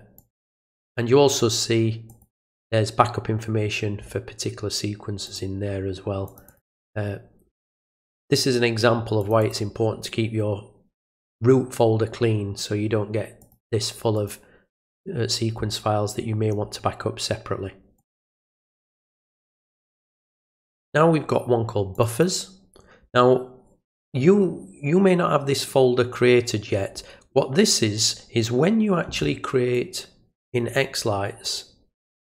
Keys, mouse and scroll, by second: 0.2 click, 0.4 click, 2.1 click, 5.3 click, 6.3 click, 6.5 click, 8.2 click, 9.2 click, 9.4 click, 13.4 click, 14.2 click, 18.0 click, 19.7 click, 22.0 click, 22.1 click, 29.7-30.5 drag, 31.4 right click.